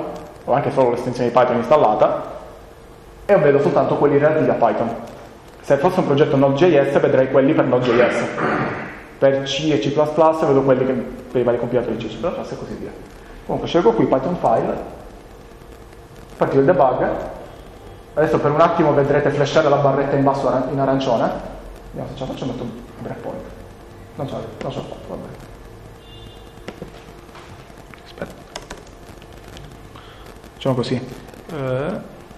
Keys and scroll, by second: 14.5 Return, 27.9 Up, 28.2 Left, 28.5 Return, 28.6 Return.